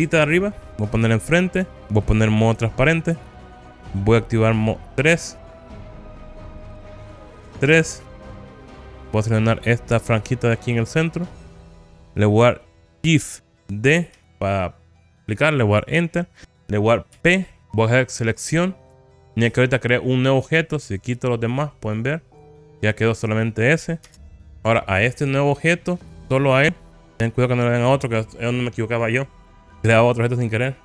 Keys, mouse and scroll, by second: 1.4 KP_1, 3.2 alt+z, 5.2 KP_3, 6.7 KP_1, 7.8 3, 8.5-9.6 scroll up 2, 9.6-12.3 drag, 14.4 shift+d, 15.9 click, 17.2 p, 21.4 click, 22.0 click, 22.5 click, 23.4 click, 24.1 Tab, 24.4 middle click, 24.4 click, 24.4 scroll down 4, 26.2 click, 26.7 click, 28.1 click.